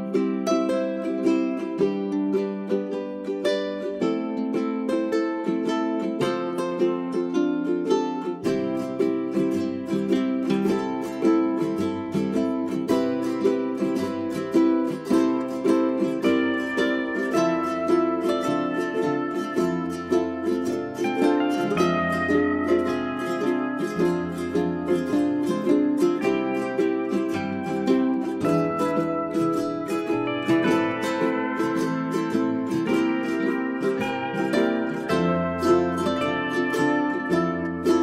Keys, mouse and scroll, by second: 1.9 ctrl+a, 2.3-12.7 drag, 14.1 right click, 14.7 1, 15.9 click, 17.1 scroll down 1, 17.5 middle click, 18.2-18.7 scroll up 1, 18.7 click, 19.1 g, 19.3-25.5 drag, 25.7-26.1 scroll down 1, 26.1 middle click, 27.1 click, 28.9-29.3 scroll up 1, 29.3 click, 29.5-30.3 scroll up 2, 29.8 click, 30.3-33.2 drag, 35.3 scroll down 1, 35.5 middle click, 36.6-37.1 scroll down 1, 37.1 middle click, 37.5 click.